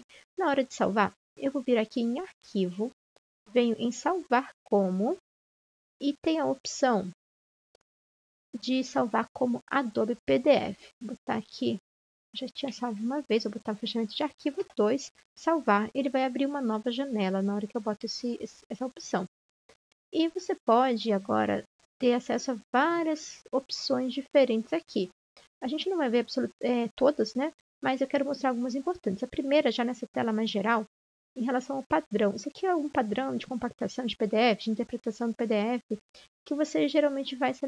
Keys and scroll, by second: 12.9 2.